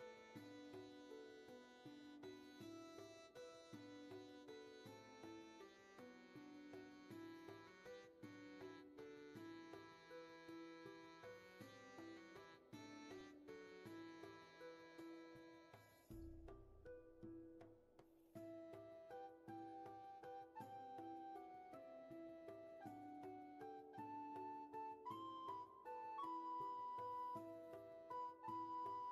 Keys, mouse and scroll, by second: 1.5 ctrl+shift+z, 2.7 ctrl+z, 4.2 ctrl+shift+z.